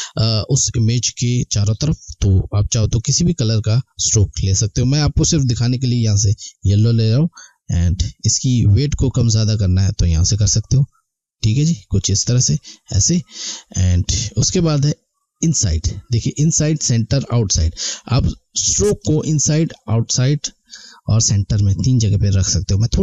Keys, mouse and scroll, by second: 2.9 click, 6.1 click, 13.9 click, 19.0 click.